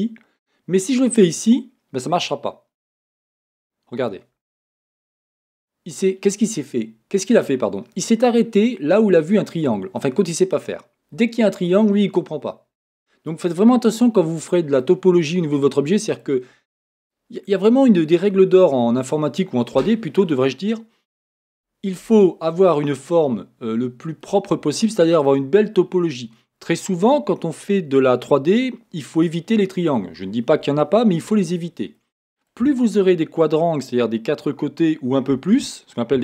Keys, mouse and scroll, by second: 2.1 middle click, 4.0-18.8 middle drag, 4.1 click, 8.6 scroll up 1, 10.5-12.7 scroll up 1, 14.3-14.8 scroll, 24.2-28.3 middle drag, 32.0-36.0 middle drag.